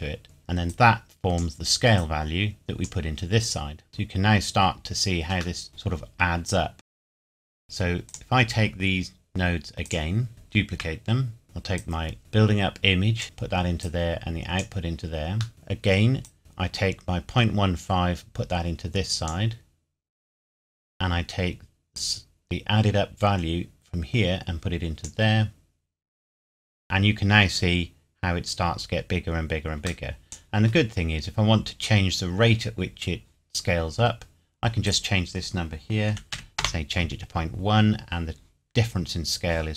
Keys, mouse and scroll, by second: 0.2 click, 3.9-5.5 scroll down 1, 5.6 middle click, 6.7 click, 7.0-7.3 scroll down 2, 7.2 click, 7.3 shift+middle click, 7.5 shift+click, 10.3 shift+d, 11.4 middle click, 11.8 click, 16.3 click, 21.9 click, 29.9 click, 30.1 middle click, 31.0-31.7 scroll up 1, 34.9 click, 36.1 KP_Decimal, 36.3 KP_1, 36.6 KP_Enter.